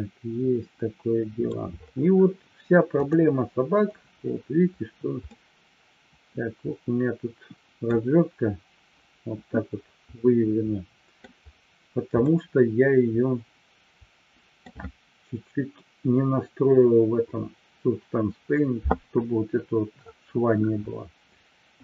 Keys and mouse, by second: 2.9 click, 5.1-7.9 middle drag, 10.1-11.1 middle drag, 12.3-14.7 middle drag.